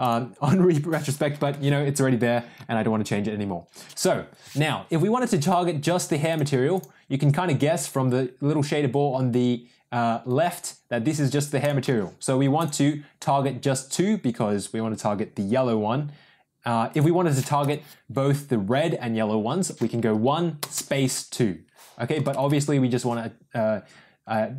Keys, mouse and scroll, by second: 6.2 click, 11.6-24.5 drag, 22.2 BackSpace.